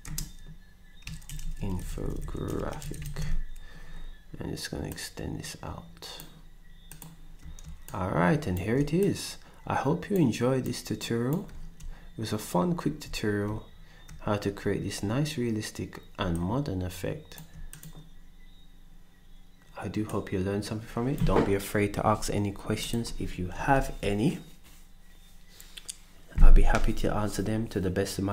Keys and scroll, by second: 0.0-0.5 typing, 2.1-3.4 typing, 23.9 ctrl+s.